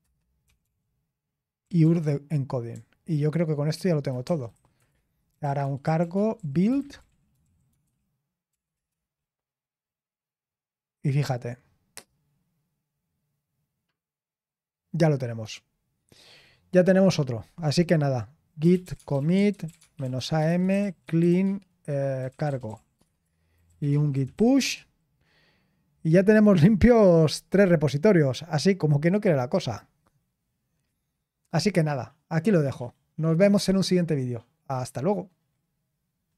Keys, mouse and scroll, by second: 0.0-0.6 typing, 1.8-7.7 typing, 19.6-24.8 typing, 23.5 Return, 26.6 typing, 36.3 click.